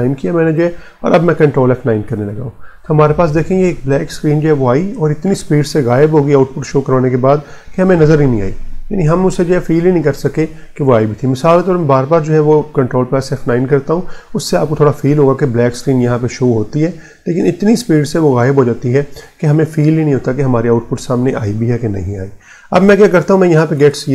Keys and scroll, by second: 1.4 Return, 1.8 ctrl+F9, 14.3 ctrl+F9, 22.6-24.1 typing.